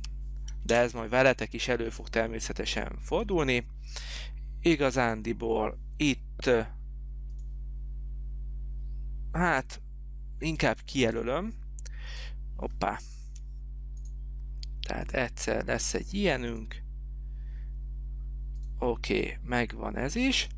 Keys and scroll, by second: 0.0-0.5 typing, 1.0 Return, 13.4 Escape.